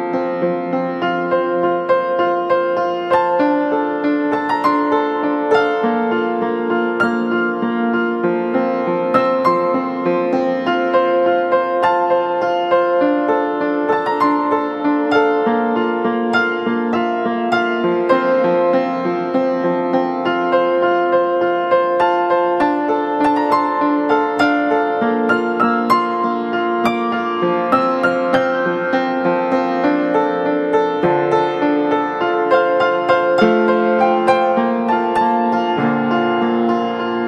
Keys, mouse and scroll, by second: 27.1-27.9 ], 28.3 ], 29.3 ], 29.7 ].